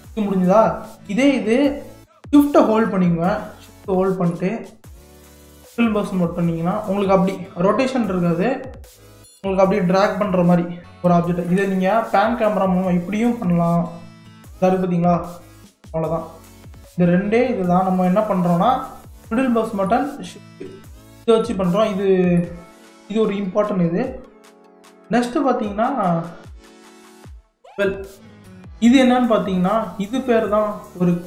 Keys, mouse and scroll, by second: 4.3 scroll up 1, 4.3-7.4 shift+middle drag, 12.5 click, 14.8-17.7 drag, 19.2-24.6 middle drag, 26.1-27.8 middle drag, 27.8-29.5 drag, 29.5 scroll up 1, 30.4 click.